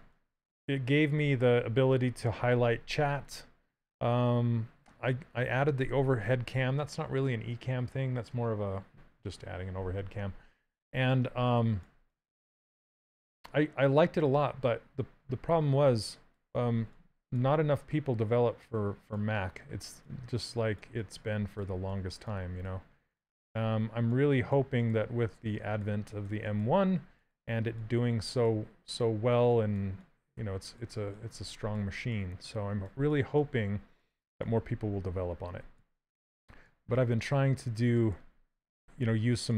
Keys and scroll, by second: 22.0 s, 29.6 s, 38.2 s.